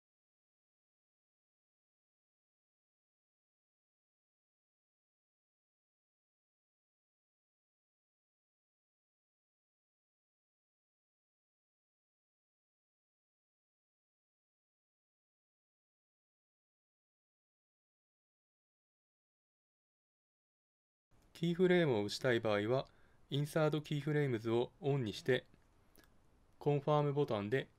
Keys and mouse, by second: 1.3-3.1 drag, 5.6-7.4 middle drag, 7.5 middle click, 9.2-11.0 drag, 11.0-12.6 middle drag, 14.3 middle click, 14.5 middle click, 18.3-19.9 middle drag, 20.0 middle click, 20.5 middle click, 24.5 click, 24.5 middle click, 25.0 click, 26.4 middle click.